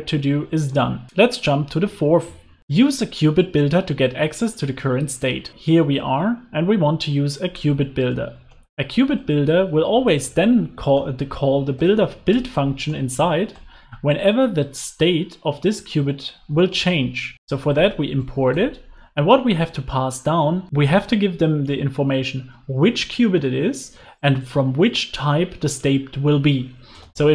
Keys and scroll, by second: 8.5 alt+Return, 12.4 Return, 16.7 alt+Return.